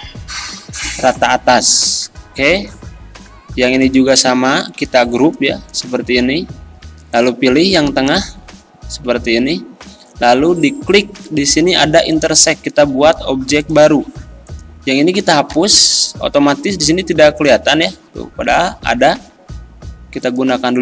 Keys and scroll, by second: 5.0 ctrl+g, 6.1 ctrl+z, 9.1 ctrl+z, 15.6 Delete, 18.6 ctrl+z.